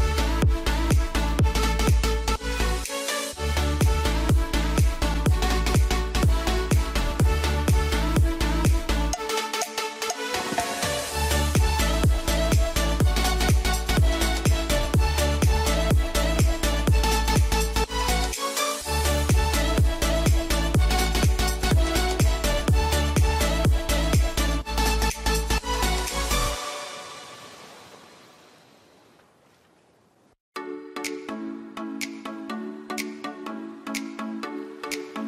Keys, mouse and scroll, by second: 1.5 ctrl+g, 2.0 click, 3.1 right click, 5.0 click, 5.2 right click, 6.4 shift+Page_Down, 7.2 click, 7.7 Page_Down, 8.5 click, 12.9 ctrl+z, 13.7 F2, 14.0 click, 20.0 F3, 20.8 click, 22.3 ctrl+g, 22.7 click, 23.0 F3, 24.1 click, 24.9 ctrl+u, 25.3 click, 25.5 F2, 25.8 click, 31.7 click.